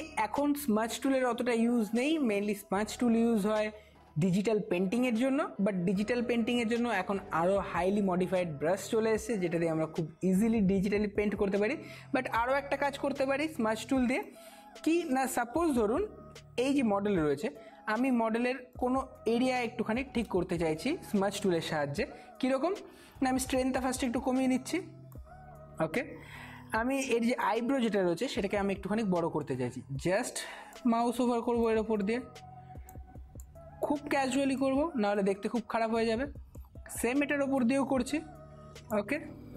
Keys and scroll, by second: 19.4 space, 27.4 [, 27.6 [.